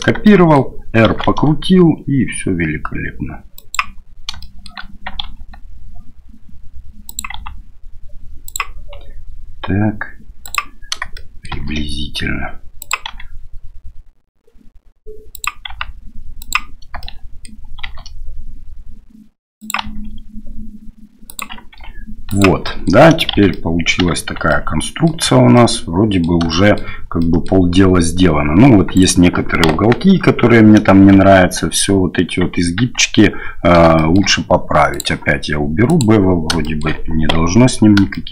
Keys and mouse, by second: 0.3 shift+click, 1.1 shift+d, 4.5 shift+click, 7.4 g, 8.9 r, 11.1 shift+middle click, 11.6 shift+d, 13.0 r, 15.7 g, 17.1 shift+click, 17.9 shift+d, 21.7 r, 22.8 middle click, 23.3 shift+z, 23.5 middle click, 24.2 Tab, 24.5 middle click, 25.5 middle click, 26.5 shift+middle click, 27.2 middle click, 28.9-29.6 right drag, 29.6 KP_1, 30.0 KP_3, 31.1 shift+z, 32.8 Tab, 33.9 shift+middle click, 34.9-36.3 drag, 36.6 shift+middle click, 38.1 shift+click.